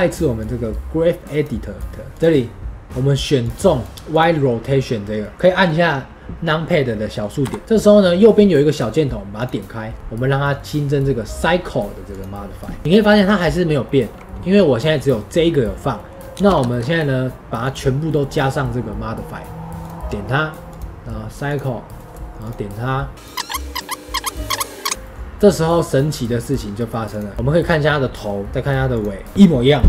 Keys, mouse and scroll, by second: 0.3-2.9 drag, 3.9-7.3 middle drag, 7.3 KP_Decimal, 16.6-29.8 shift+middle drag.